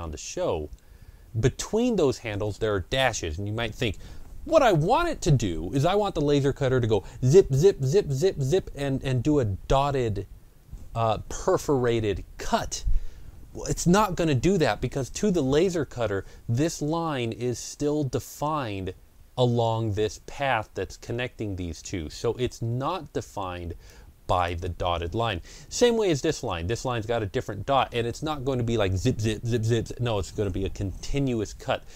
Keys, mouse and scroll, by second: 21.6-28.9 drag.